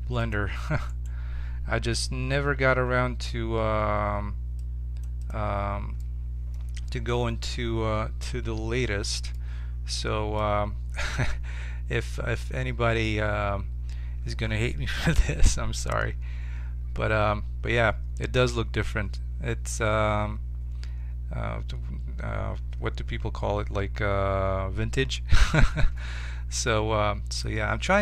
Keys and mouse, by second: 0.9-2.9 drag, 2.4 x, 6.0-8.8 middle drag, 9.5-11.5 middle drag, 12.0 ctrl+Tab, 26.7-28.0 middle drag.